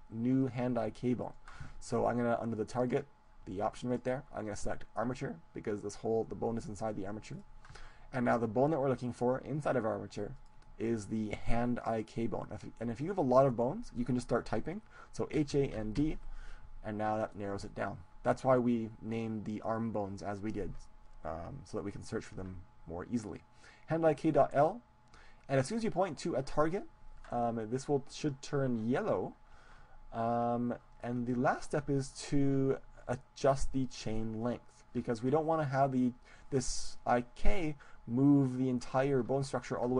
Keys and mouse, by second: 0.5-3.0 right drag, 3.9-5.7 drag, 10.3-12.3 drag, 31.1-34.1 middle drag.